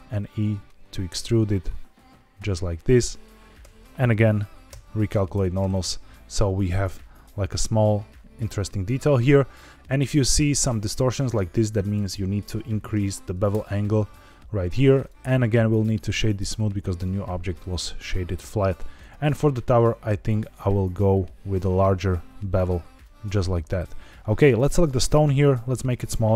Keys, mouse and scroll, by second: 2.7 click, 3.5 a, 4.6 shift+n, 5.2 Tab, 6.0-6.4 scroll up 2, 6.4 middle drag, 7.5-8.3 middle drag, 9.8-10.2 middle drag, 11.8-13.4 drag, 14.9-15.7 right drag, 17.0-17.5 middle drag, 18.0-18.9 scroll down 2, 18.9 click, 20.1-23.0 shift+drag, 23.7 scroll down 2, 24.4 click, 25.1 s, 25.7 click.